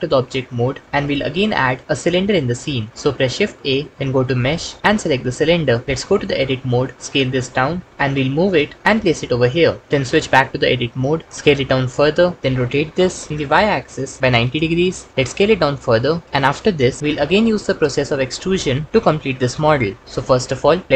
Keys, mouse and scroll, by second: 3.2 shift+a, 5.8 Tab, 6.9 s, 8.6 Tab, 8.9 g, 10.7 Tab, 11.7-15.1 typing, 14.7 KP_Enter, 18.1 s, 18.9 g.